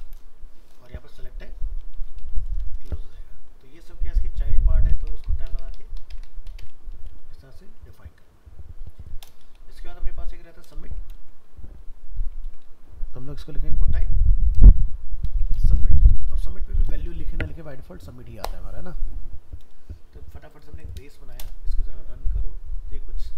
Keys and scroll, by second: 11.1 ctrl+c, 12.5 ctrl+v, 17.6 ctrl+s.